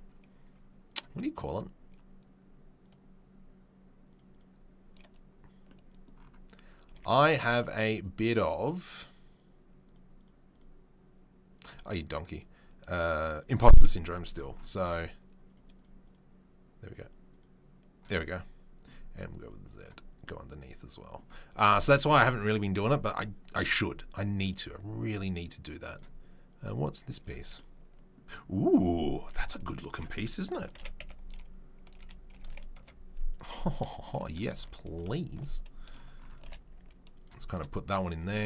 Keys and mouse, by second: 2.9-4.1 drag, 4.1 middle click, 4.4-8.9 middle drag, 8.9 click, 9.0-9.3 middle drag, 9.3-9.9 drag, 9.9 middle click, 10.1 click, 10.2 middle drag, 10.5 click, 10.6-11.5 middle drag, 11.5 click, 11.6-12.0 middle drag, 12.0 click, 12.1-15.4 middle drag, 15.4 click, 15.6 middle click, 15.7 click, 15.8 middle click, 16.0 click, 16.1-17.3 middle drag, 17.3 click, 17.4-19.7 middle drag, 19.7 click, 19.8-25.9 middle drag, 25.9 click, 26.0-26.5 middle drag, 26.5-29.2 drag, 29.2-38.4 middle drag, 29.2 s, 30.7 r, 33.8 KP_3, 34.5 ctrl+KP_1, 35.0 ctrl+KP_3, 36.4 g.